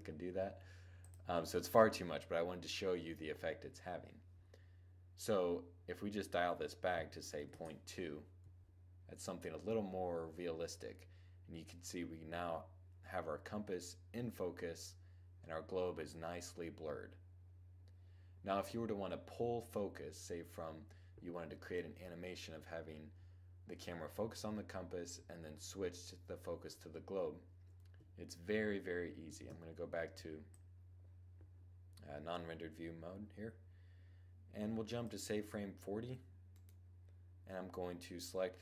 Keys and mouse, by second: 29.0 shift+z, 30.1-31.8 drag, 36.1-38.1 right drag.